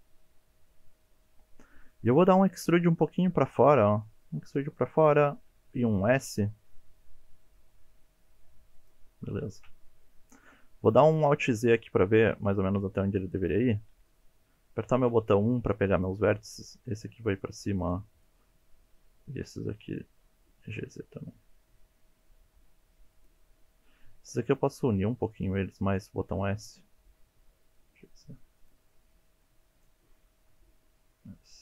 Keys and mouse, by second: 2.3 middle click, 3.4 e, 4.5 click, 5.5 s, 8.8 click, 9.7 KP_1, 11.3 alt+z, 11.8 shift+middle click, 15.1 1, 15.7-16.1 drag, 16.7 g, 16.9 z, 17.8 drag, 18.3-20.0 drag, 20.7 g, 20.8 z, 23.2 click, 24.5 s, 25.4 click, 26.0-26.3 drag, 26.4 g, 27.9 z, 28.6 click, 29.3-29.9 drag, 30.4 s.